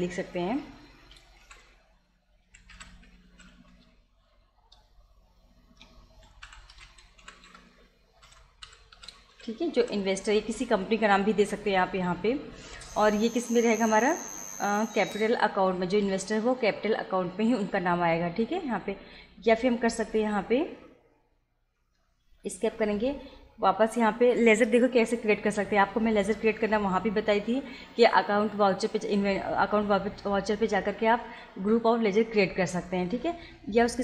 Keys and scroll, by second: 1.4-4.0 typing, 5.9-10.3 typing, 12.5 Return, 20.1 Up, 21.8 Escape.